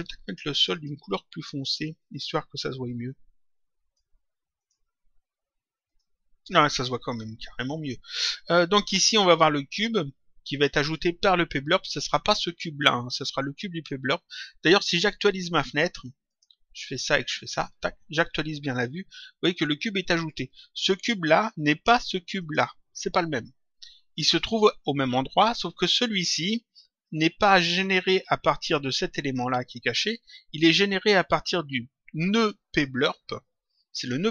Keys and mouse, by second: 0.5 click, 1.9 click, 4.5 click, 5.8 click, 16.2 click, 17.4 click, 22.3 click.